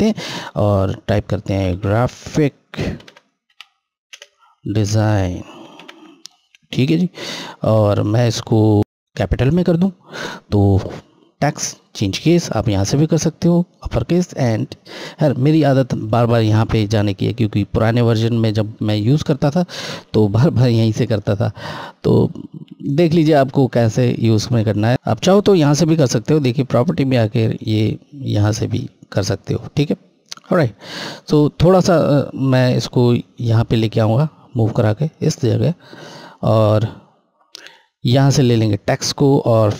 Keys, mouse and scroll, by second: 1.3-1.6 typing, 3.8-5.1 typing, 7.1 typing, 7.3 ctrl+a, 9.9 click, 13.8 click, 20.8 click, 23.3 scroll, 23.5 scroll down 1, 25.5-25.9 scroll up 1, 26.0 click, 33.5 click, 35.2-35.5 scroll down 1, 38.0 click.